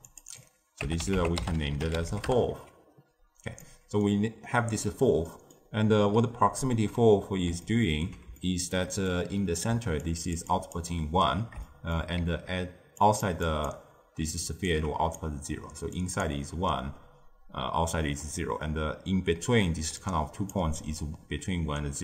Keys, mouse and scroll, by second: 0.0 click, 0.2-1.6 drag, 1.6 l, 2.0 f, 3.2-3.5 scroll down 1, 3.5-9.6 middle drag, 9.6-22.0 typing, 9.9 click, 10.4 click, 11.6-12.1 shift+middle drag, 12.9 click, 13.4 click, 14.6-15.1 drag, 15.9 click, 19.9 click.